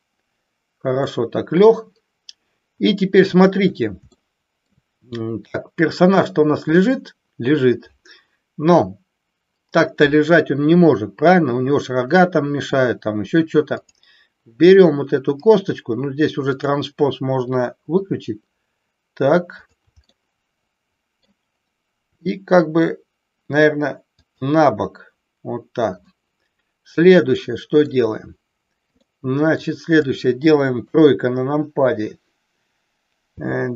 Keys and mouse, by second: 4.2 shift+middle click, 13.7 click, 17.8 r, 19.5 click, 20.1-21.2 middle drag, 22.1 r, 24.2 click, 26.0-27.8 middle drag, 29.0-29.6 middle drag, 30.7 KP_3, 33.2 g.